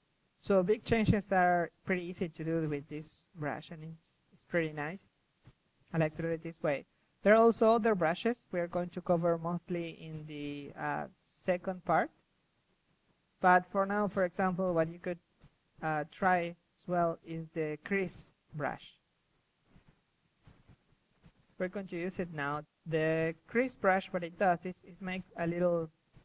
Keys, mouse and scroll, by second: 1.7 middle click, 2.0 KP_3, 2.5 click, 3.2 KP_1, 3.6-5.4 drag, 5.4-8.1 typing, 6.0-6.5 drag, 7.3-8.1 drag, 8.3 click, 8.8-12.2 drag, 11.6 s, 12.4 g, 13.0 click, 13.6 KP_1, 16.1-17.2 middle drag, 17.2 KP_1, 17.4-19.2 drag, 17.5 s, 17.9 KP_1, 18.2 g, 19.4-21.8 drag, 21.8 s, 22.3 KP_1, 22.3 KP_3, 23.0 g, 23.3-23.7 drag, 24.0-24.3 drag, 24.5-24.8 drag, 25.5-26.2 typing.